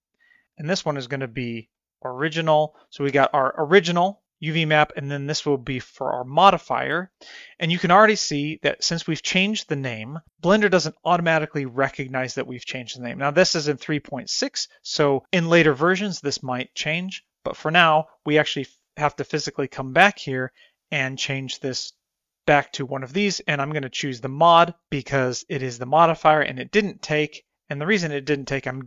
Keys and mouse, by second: 1.7 click, 1.9 shift+click, 20.4-24.9 drag.